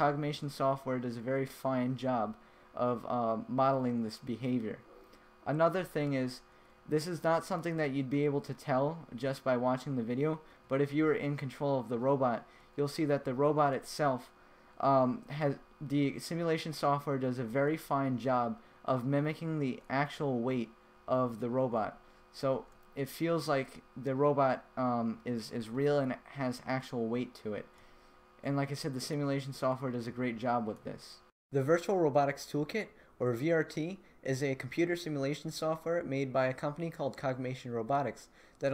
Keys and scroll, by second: 0.7 a, 1.7 w, 2.4 s, 3.8 d, 4.7 w, 5.5 a, 6.5-13.1 typing, 14.2 w, 15.2 a, 15.9 w, 17.3 a, 18.2 w, 20.3 d, 21.7-24.2 typing, 26.1-29.5 typing, 30.5 a, 31.2 d.